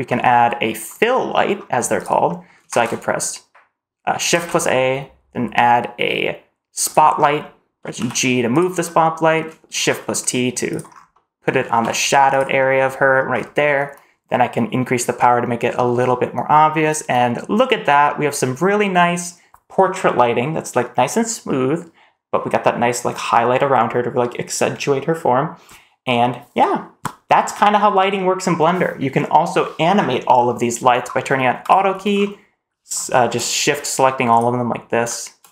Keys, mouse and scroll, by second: 0.8-1.2 middle drag, 1.5 scroll down 1, 1.9 click, 2.2 middle drag, 2.6 shift+a, 4.2 shift+a, 7.1-7.9 scroll down 3, 7.9 g, 8.7-9.0 middle drag, 9.7 shift+t, 10.8 scroll up 2, 11.0 middle drag, 11.6 shift+t, 12.5-13.0 middle drag, 13.2-15.0 scroll up 1, 15.1-16.8 drag, 17.5 middle click, 17.5-19.1 scroll down 2, 29.8-31.6 scroll down 3, 31.6 click, 32.0-33.2 scroll down 2, 34.2 shift+click.